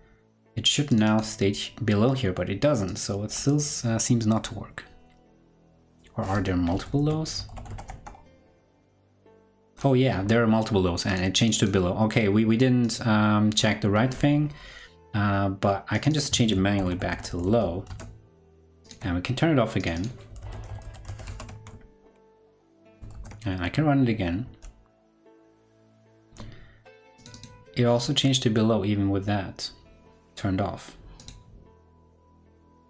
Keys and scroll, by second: 6.9 super+f, 17.4 super+s, 17.8 super+Tab, 21.1 super+s, 21.2 super+Tab, 22.9 super+s, 22.9 super+Tab, 22.9 ctrl+Right, 23.1 super+r, 25.9 ctrl+Left.